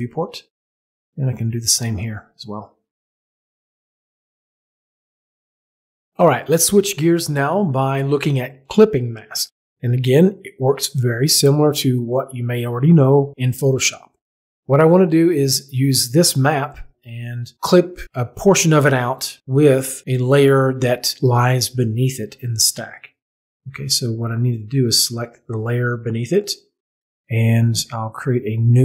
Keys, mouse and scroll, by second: 1.5 right click, 2.1 click, 24.5 click, 28.6 click.